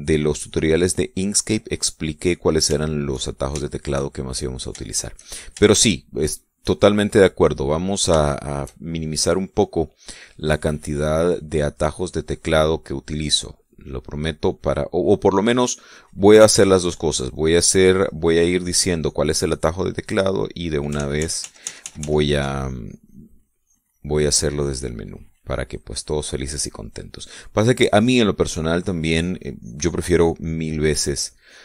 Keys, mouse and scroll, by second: 1.1-3.3 drag, 3.6 shift+middle click, 5.2 shift+middle click, 5.6-6.4 shift+middle drag, 6.9 shift+middle click, 7.4 shift+middle click, 8.0-10.2 shift+middle drag, 11.6 middle click, 12.2-13.3 drag, 13.6 middle click, 14.4 click, 15.0 middle click, 16.0-17.6 drag, 17.8-21.6 drag, 21.7 ctrl+z, 23.4-24.8 ctrl+drag, 25.0 ctrl+click, 25.8-27.9 ctrl+drag, 29.8-31.6 drag.